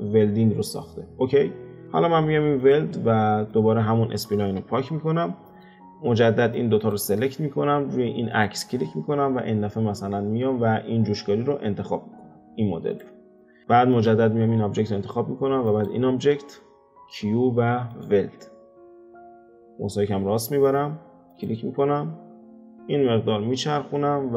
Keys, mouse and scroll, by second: 2.6 click, 3.5 shift+click, 4.6 x, 5.2-6.5 middle drag, 6.5 click, 8.3-11.5 drag, 13.9 click, 15.6 shift+click, 17.0 q.